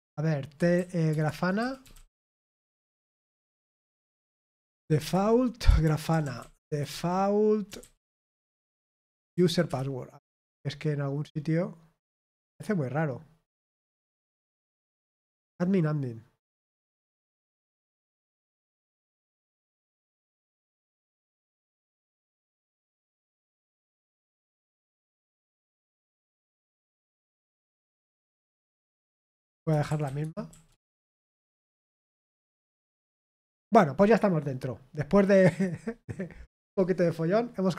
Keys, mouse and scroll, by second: 2.6-7.3 typing, 12.4 click, 14.4 scroll down 1, 21.0 click, 22.2 click, 24.8 click, 30.2-32.8 typing, 35.5 click.